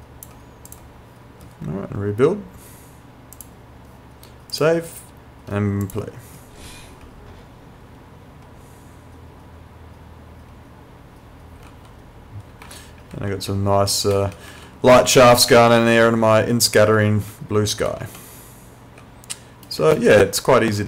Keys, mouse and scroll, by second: 3.4 click, 7.0 w, 11.7-14.5 typing, 16.1-18.0 typing, 19.8-20.8 typing.